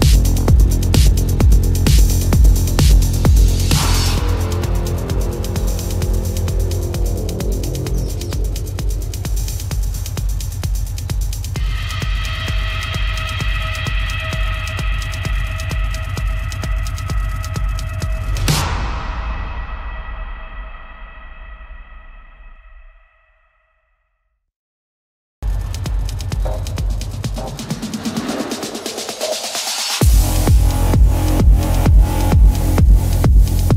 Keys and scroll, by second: 1.4 space, 3.0 ctrl+-, 3.4 space, 4.5 ctrl+=, 5.1 ctrl+=, 5.7 ctrl+=, 6.0 space, 6.6 ctrl+-, 6.9 space, 8.0 ctrl+alt+z, 8.3 ], 8.7 ], 10.0 space, 11.4 ctrl+alt+z, 11.9 ctrl+-, 13.6 space, 14.1 ctrl+=, 15.4 ctrl+alt+z, 16.9 space, 17.7 ctrl+alt+z, 18.3 ctrl+alt+z, 19.3 space, 22.2 ctrl+-, 28.1 space, 33.4 ctrl+alt+z.